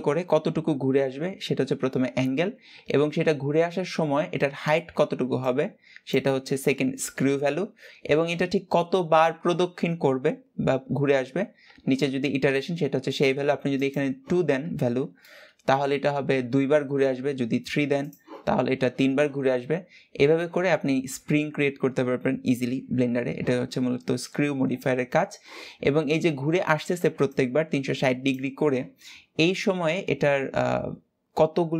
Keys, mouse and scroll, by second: 2.9 Escape, 3.7 click, 12.0-13.5 drag, 13.5-16.3 shift+middle drag, 16.3 click, 16.7-17.4 scroll down 1, 17.4-18.6 scroll down 1, 18.6-19.7 scroll down 1, 24.2-25.3 scroll up 1, 25.3-26.9 scroll up 1, 26.9 scroll up 1.